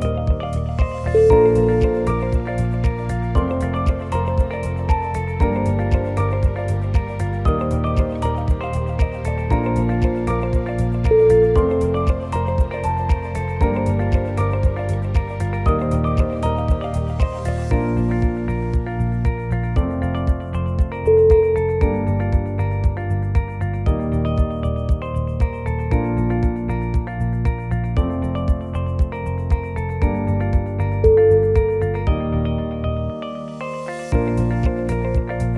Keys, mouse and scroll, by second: 0.2 click, 0.2 g, 1.9 Tab, 2.4 Tab, 2.7 click, 3.1 g, 4.3 Tab, 4.8 middle click, 5.1 ctrl+z, 5.5 ctrl+x, 6.3 shift+middle click, 6.8 Tab, 7.5 right click, 8.7 click, 9.1 middle click, 10.0 scroll down 3, 10.2 middle click, 11.4 click, 11.9 click, 13.5 Tab, 13.7-14.8 scroll up 7, 14.1 shift+middle click, 14.9 shift+middle click, 16.2 ctrl+r, 19.1 ctrl+z, 19.5 ctrl+r, 22.2-23.0 scroll down 5, 23.0 KP_1, 23.4 shift+middle click, 24.2 shift+middle click, 24.4 shift+middle click, 24.5-24.9 scroll up 3, 25.1 ctrl+r, 27.5 ctrl+r, 30.3 shift+middle click, 31.5 shift+middle click, 32.0-32.3 shift+scroll up 2, 32.5 ctrl+r, 34.3 alt+click, 35.0 shift+click.